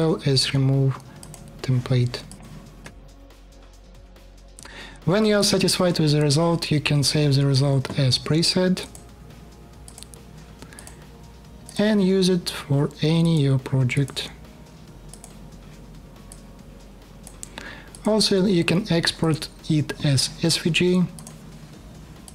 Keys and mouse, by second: 1.0 middle click, 2.0 click, 2.6 middle click, 2.9 click, 3.0 middle click, 3.3 click, 3.5 middle click, 3.8 click, 3.9 middle click, 4.3 click, 22.0 middle click.